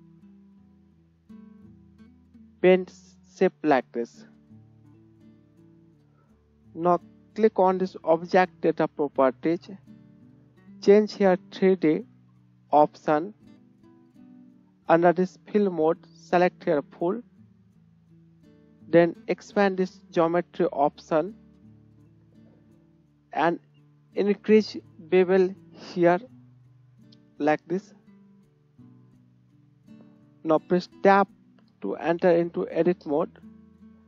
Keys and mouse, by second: 4.3 click, 4.6-10.8 drag, 5.9 Tab, 10.8 right click, 12.6 middle click, 12.7-15.8 drag, 15.8-34.0 middle drag, 31.3 Tab.